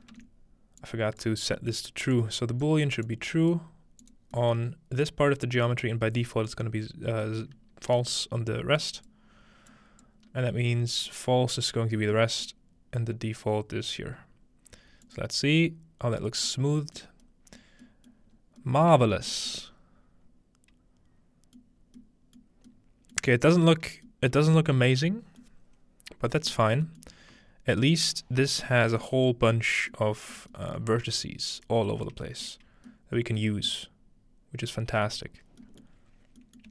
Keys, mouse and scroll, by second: 0.1 ctrl+x, 0.8 click, 2.2 click, 3.1 click, 4.2-5.2 scroll down 1, 4.4 middle click, 5.2-5.6 middle drag, 5.2-6.0 scroll down 1, 6.0-7.2 scroll up 2, 7.2-8.3 scroll up 1, 7.7-8.8 middle drag, 8.8-11.2 drag, 11.8-13.3 scroll down 1, 12.5-14.2 middle drag, 15.0 click, 17.0 middle drag, 17.2-17.8 scroll up 1, 17.8 middle click, 17.8 scroll down 1, 18.3 scroll up 1, 19.4 scroll up 1, 21.6-22.0 middle drag, 21.8 scroll down 2, 22.4-22.7 middle drag, 23.3 middle click, 23.8 middle click, 25.4-26.9 middle drag, 27.0-28.6 middle drag, 28.3-31.6 scroll up 2, 29.0 middle click, 29.5 middle click, 30.4 shift+middle click, 30.8 middle click, 31.6-34.3 scroll down 1, 35.1 middle click, 35.4-36.7 scroll down 1, 36.2 middle click.